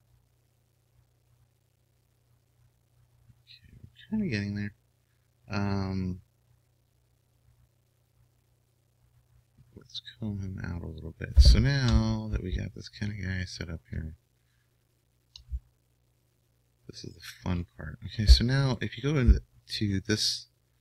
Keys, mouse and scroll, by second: 12.8-14.1 middle drag, 14.9-17.7 middle drag, 19.4-20.6 drag.